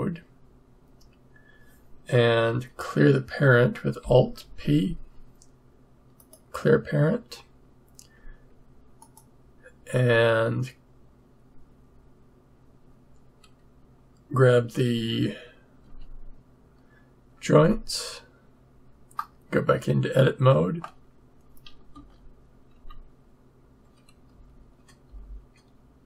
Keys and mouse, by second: 0.1 click, 4.4 alt+p, 15.8 Tab, 19.1-21.9 drag, 21.9 a, 22.7 Tab, 24.2 Right, 25.0 Left.